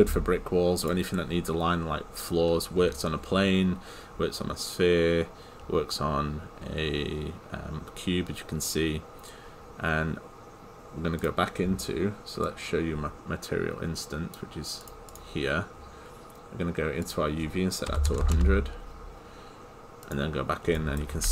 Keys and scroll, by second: 18.4 Return.